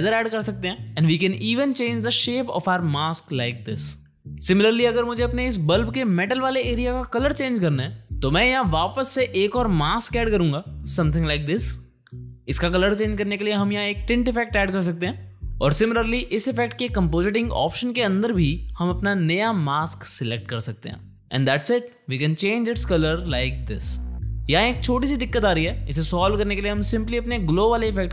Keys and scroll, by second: 9.1 space, 11.1 space, 13.1 ctrl+space, 13.3-14.2 typing, 14.5 Return, 16.0 e.